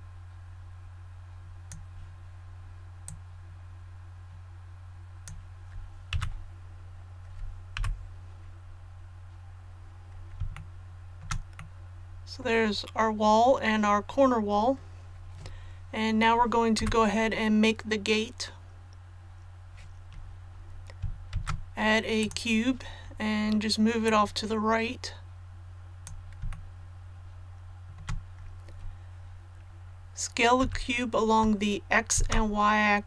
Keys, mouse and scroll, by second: 6.1 a, 7.7 KP_1, 8.6 scroll down 1, 10.5 shift+middle click, 11.5 middle click, 16.7 KP_1, 20.5 click, 21.3 shift+a, 22.1-26.3 drag, 26.5-27.9 shift+middle drag, 30.6 s, 32.1 shift+z.